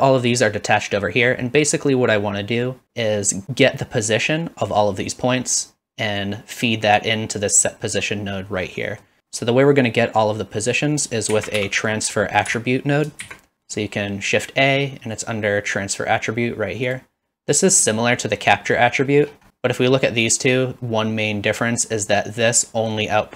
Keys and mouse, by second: 8.9 middle click, 11.3 shift+a.